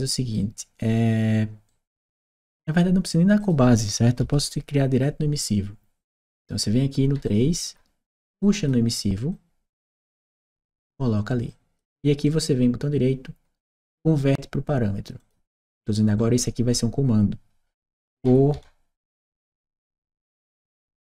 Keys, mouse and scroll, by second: 1.5 right click, 3.2 click, 7.1 click, 8.2 click, 9.1-10.3 drag, 11.3 click, 12.1 right click, 15.0 click, 18.0 shift+c, 20.7 shift+e.